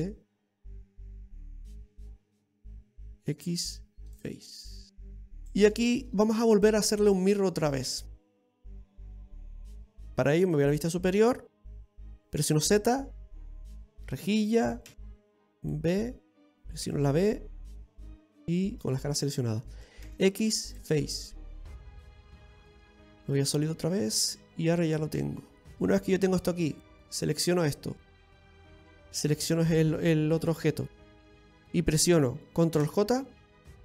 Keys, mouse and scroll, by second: 4.1 x, 5.1 middle click, 5.1 scroll down 2, 6.0 right click, 7.2 right click, 7.7 scroll down 3, 8.0 middle click, 8.8 scroll down 1, 9.2 middle click, 9.6-10.0 scroll up 2, 10.0 b, 15.5 b, 16.4 ctrl+z, 16.4 click, 16.5 right click, 17.5 b, 22.8 z, 23.9-24.8 scroll down 2, 24.2 middle click, 25.7 Tab, 26.2-26.5 scroll up 4, 26.8 shift+middle click, 27.5 right click, 30.1 shift+right click, 33.5 ctrl+j.